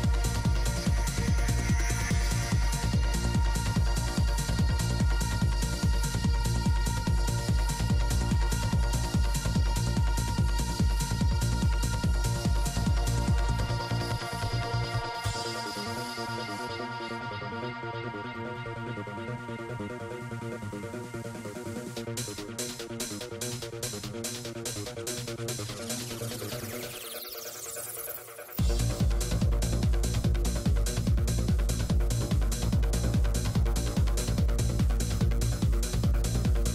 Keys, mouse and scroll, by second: 6.4 shift+f, 7.6 click, 8.2-9.4 drag, 8.2-9.4 middle drag, 9.5 middle click, 9.8 click, 12.1-15.6 drag, 12.2-14.1 middle drag, 15.0-17.0 middle drag, 18.5 g, 18.5 f, 18.9 f, 19.8 click, 19.9 f, 20.5-22.1 drag, 21.7 middle click, 21.7 right click, 22.0 middle click, 22.1 f, 22.5-24.8 drag, 22.5 right click, 22.8-24.8 right drag, 23.6 middle click, 24.5 middle click, 25.1 f, 25.2-27.4 drag, 25.5 f, 26.2 f, 28.6 f, 28.8-29.9 drag, 30.1 f, 30.9 middle click, 30.9 f, 30.9 i, 31.2-32.7 drag, 32.7 ctrl+z, 34.2-35.8 drag, 35.9-36.7 middle drag.